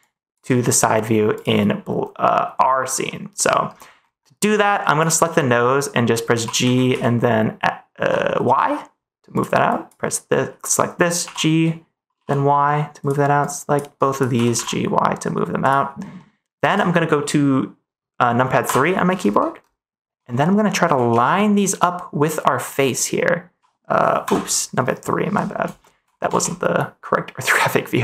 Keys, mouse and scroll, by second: 3.0 middle click, 4.8 click, 6.3 g, 6.6 z, 6.8 x, 7.9 y, 9.7 click, 11.2 g, 12.1 y, 12.9 click, 13.4 click, 13.9 click, 14.3 g, 14.5 y, 16.1 middle click, 16.6 ctrl+s, 20.4 middle click, 21.0 a, 22.6 middle click, 25.7 middle click, 26.3 ctrl+s.